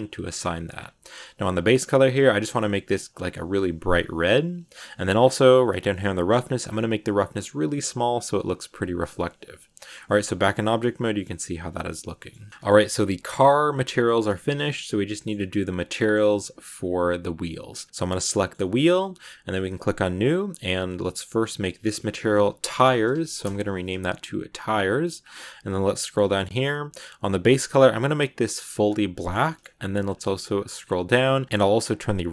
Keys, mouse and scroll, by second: 0.2 scroll down 1, 0.2 scroll up 2, 0.3-0.7 scroll down 8, 1.3 click, 5.1-5.5 scroll down 8, 6.2-8.6 drag, 8.6 scroll down 1, 8.8 Tab, 9.0-10.1 middle drag, 10.1 scroll up 2, 10.3-11.4 middle drag, 11.4 z, 11.9 scroll up 1, 12.0 middle click, 12.5 scroll down 2, 12.6 middle click, 12.7 g, 14.3 shift+middle click, 14.5-15.1 scroll up 2, 15.1-16.2 middle drag, 16.2-17.9 scroll up 1, 17.9 right click, 18.2 shift+middle click, 18.5-19.6 scroll up 1, 19.6-21.3 drag, 21.4-24.4 drag, 24.5 scroll down 5, 25.2-26.5 scroll down 2, 26.5 click, 29.1 middle click, 29.9 scroll down 2, 30.7 scroll down 8, 31.4-32.3 drag.